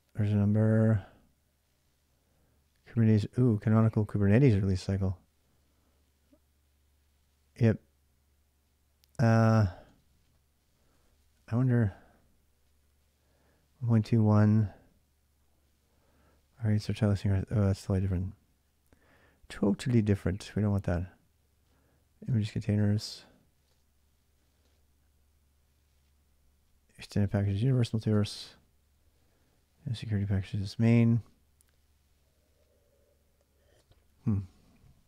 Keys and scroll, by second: 3.1 j, 3.6 j, 9.6-10.7 typing, 11.9 typing, 17.1-18.3 typing, 19.8 typing, 22.0 typing, 23.4-24.4 typing, 33.5 space.